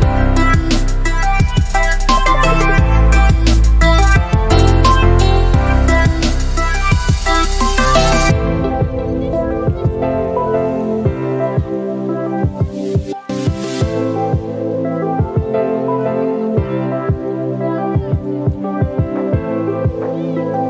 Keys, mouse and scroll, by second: 5.1-6.3 shift+drag, 12.4 click, 16.4 space, 16.9 ctrl+click.